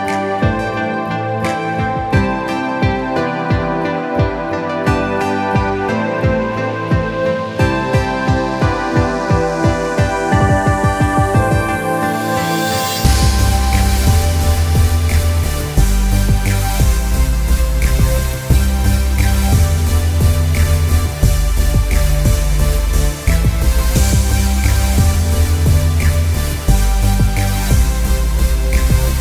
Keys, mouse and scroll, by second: 0.0-5.3 drag, 6.9 click, 8.2 space, 8.3 click, 8.7 space, 9.7 click, 11.5 ctrl+u, 12.5 click, 13.0 Down, 13.9-19.0 drag, 19.6 Up, 20.5-27.3 drag, 27.3 Return.